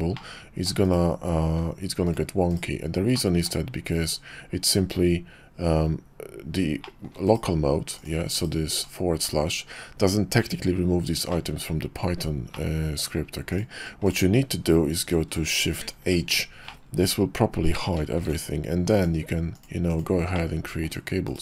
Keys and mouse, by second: 0.1-2.1 drag, 2.5 /, 3.1-3.5 drag, 6.8 shift+middle click, 7.2 /, 7.9 click, 8.3 /, 8.8 /, 11.3-12.2 middle drag, 12.5-13.2 middle drag, 13.5 click, 14.0 click, 15.8 shift+h, 16.8-17.7 drag, 18.2 alt+shift+c, 20.3-21.4 drag.